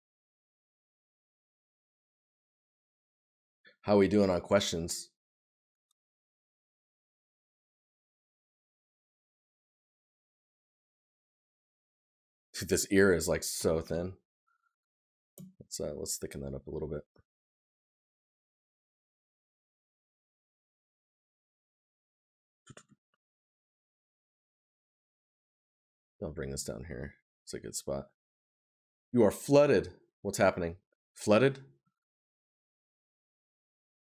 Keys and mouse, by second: 0.9 right click, 3.1 right click, 10.0 right click, 21.6 right click, 25.6 right click, 29.8 right click.